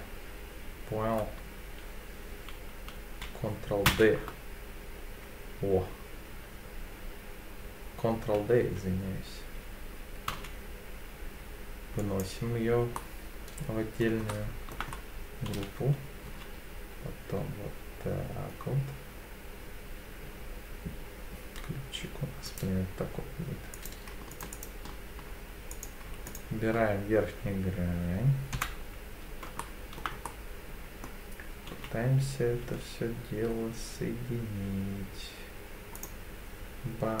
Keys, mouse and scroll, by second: 3.9 shift+d, 10.3 z, 12.0 click, 13.0-14.0 middle drag, 14.3 shift+middle click, 14.9-15.5 scroll up 1, 15.5 e, 16.3 z, 22.5-24.1 drag, 24.3 alt+click, 25.7 click, 26.3 alt+click, 28.5 KP_7, 29.6 shift+middle click, 30.2 middle click, 31.7 e, 32.7 s, 36.0-37.2 drag.